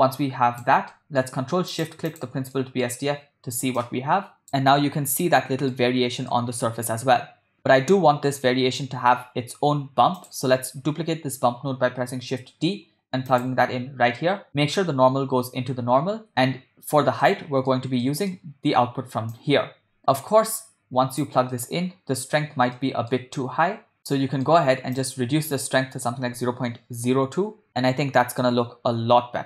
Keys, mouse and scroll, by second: 0.9 middle click, 1.7 click, 2.3 ctrl+shift+click, 2.7 middle click, 3.8-4.5 drag, 5.4-5.9 ctrl+middle drag, 6.4 shift+middle click, 10.2 click, 12.1 shift+d, 17.3 middle click, 18.1 middle click, 19.4-21.5 drag, 21.6 middle click, 22.9 ctrl+middle click, 24.0 middle click, 25.0-27.5 drag, 27.8-28.7 ctrl+middle drag.